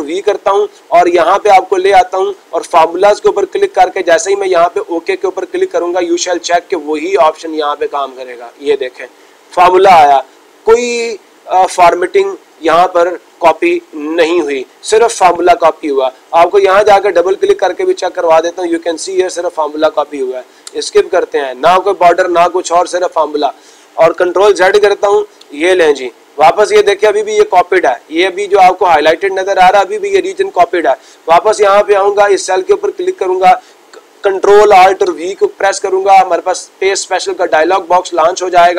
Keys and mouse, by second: 2.4 click, 6.6-7.7 drag, 7.7-8.8 drag, 17.7 click, 17.8 click, 21.9 click, 22.6 click, 22.9 click, 23.2-24.3 drag, 26.6-27.7 drag, 33.1-34.1 drag, 38.3-38.7 drag.